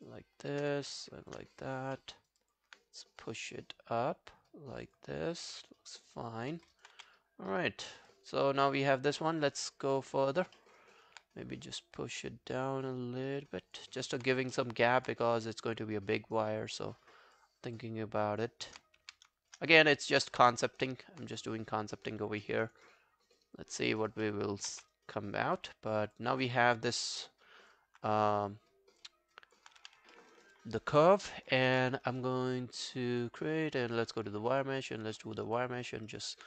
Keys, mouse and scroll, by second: 0.3 alt+click, 1.2 shift+click, 1.6 alt+click, 2.0 alt+middle click, 2.2 alt+right click, 2.4 alt+click, 5.2 alt+click, 6.1 alt+click, 6.5 alt+middle click, 6.8 alt+right click, 7.0 w, 7.5 right click, 8.9 alt+click, 9.2 alt+right click, 9.5 alt+middle click, 9.8 alt+scroll down 1, 10.0 alt+click, 10.3 alt+right click, 10.6 alt+middle click, 10.8 alt+right click, 13.9 alt+click, 14.6 alt+middle click, 14.9 alt+right click, 15.4 right click, 17.6 right click, 17.6 alt+scroll down 1, 17.8 alt+click, 19.1 q, 19.4 shift+click, 19.7 alt+click, 20.1 alt+right click, 20.3 w, 20.7 alt+middle click, 20.9 alt+right click, 22.4 alt+middle click, 22.7 alt+right click, 22.9 alt+click, 23.6 alt+scroll down 1, 23.8 alt+click, 24.0 alt+right click, 24.3 alt+middle click, 24.8 w, 24.9 right click, 26.4 scroll down 2, 26.6 alt+click, 29.4 alt+click, 29.8 q, 30.1 alt+middle click, 30.4 alt+right click, 30.6 alt+click, 31.2 alt+right click, 35.2 alt+middle click, 35.4 alt+right click, 35.6 alt+click, 35.9 alt+middle click, 36.1 alt+right click.